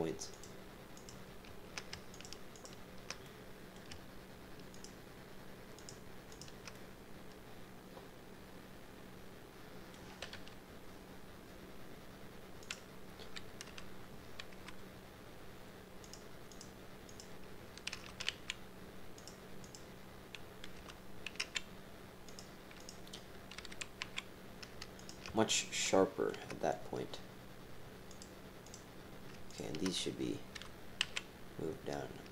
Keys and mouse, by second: 1.0 click, 2.1 shift+click, 3.2 click, 4.7 shift+click, 5.7 shift+click, 6.3 shift+click, 6.7-8.7 drag, 9.6 click, 10.3 KP_3, 12.6 click, 13.6 g, 16.5 click, 17.0 click, 17.9 g, 19.6 click, 20.7 g, 22.8 click, 24.2 g, 25.5 shift+middle click, 25.8 shift+click, 26.0 shift+click, 26.2 shift+click, 28.1 click, 28.6 click, 29.5 shift+click, 30.5 g.